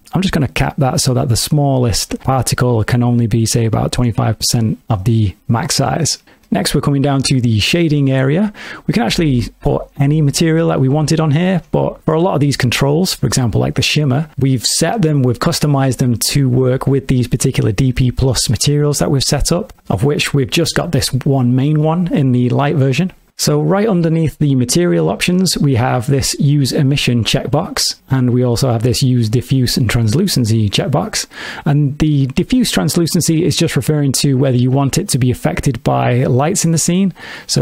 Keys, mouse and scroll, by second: 0.3 click, 6.5 middle click, 9.1 click, 18.6 click, 28.0 click, 29.4 click, 35.9 click, 36.8-37.6 scroll down 2.